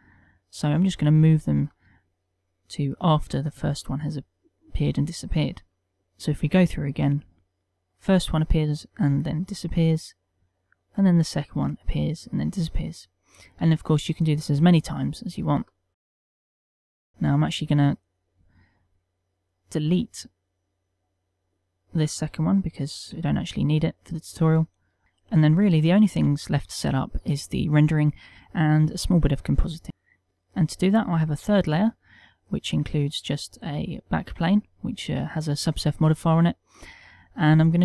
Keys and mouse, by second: 17.3 click, 17.9 middle click, 20.4 click, 22.2 middle click, 23.4 z, 23.7 b, 25.7 middle click, 26.3 ctrl+middle click, 30.0 shift+middle click, 30.3 click, 30.3 shift+3, 30.7 middle click, 31.7 shift+3, 32.3 click, 32.8 middle click, 33.7 middle click, 35.3 middle click.